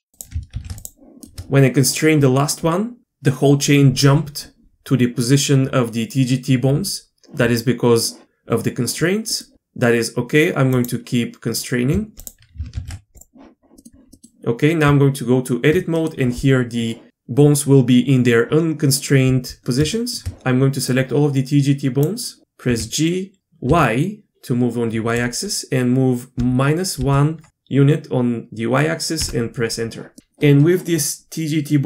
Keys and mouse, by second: 0.5 ctrl+shift+c, 1.2 shift+middle click, 9.4-10.7 middle drag, 10.7 click, 12.2 shift+click, 12.7 ctrl+shift+c, 13.8 middle drag, 14.1 middle click, 14.8 Tab, 16.0-18.3 middle drag, 19.9 shift+middle click, 20.9-22.0 drag, 22.7 g, 31.7 middle click.